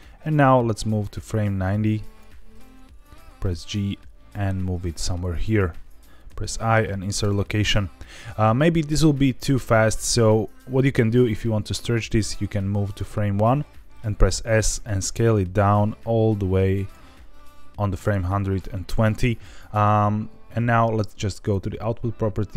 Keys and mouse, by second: 0.2-2.2 drag, 3.1 g, 5.0 click, 12.0 click, 14.2 s, 16.8 click, 21.5 click.